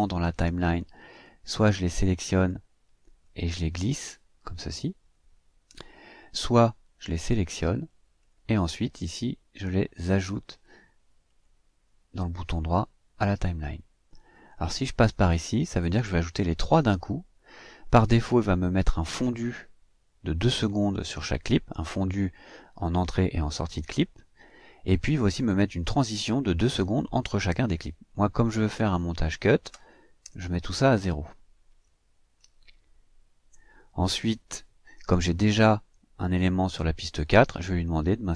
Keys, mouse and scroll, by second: 1.0 click, 3.2-5.8 drag, 6.0-11.2 drag, 11.2 right click, 14.5 click, 28.9 click, 30.2 o, 31.8 click, 33.3 KP_0.